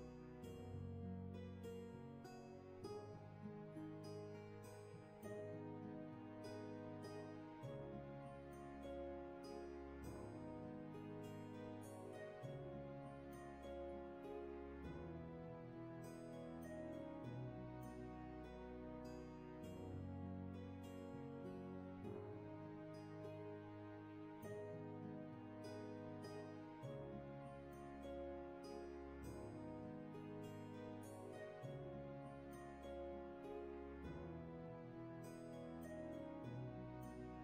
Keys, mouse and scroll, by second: 4.5 ctrl+z, 7.8 ctrl+z, 9.8 ctrl+z, 31.7 ctrl+z.